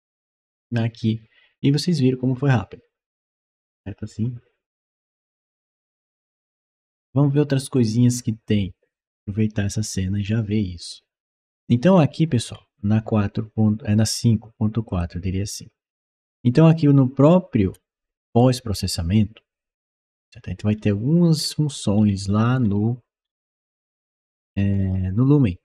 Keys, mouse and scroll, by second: 11.7-12.3 scroll down 1, 12.3 scroll down 1, 14.7 click, 17.5 middle click, 18.1 click, 19.6-20.1 scroll down 1, 20.1 scroll up 1, 20.6-21.2 scroll down 1, 21.2-22.4 scroll down 1, 22.4-23.1 scroll down 1, 23.1-24.6 scroll down 1, 24.6 scroll down 1.